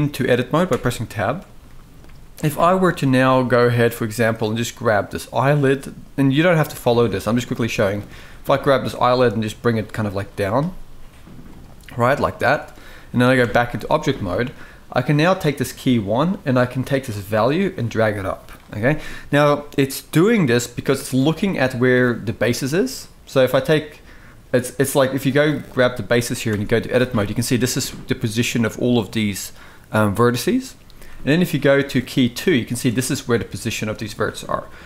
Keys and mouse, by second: 0.7 Tab, 1.4-1.7 shift+middle drag, 2.6-2.9 shift+middle drag, 4.1 click, 5.1 click, 6.9 click, 7.2 g, 10.2 click, 10.3 g, 13.2 Tab, 16.7-17.6 drag, 26.2 Tab, 26.8 shift+middle drag, 29.9 click, 31.5 click, 33.8 shift+middle drag.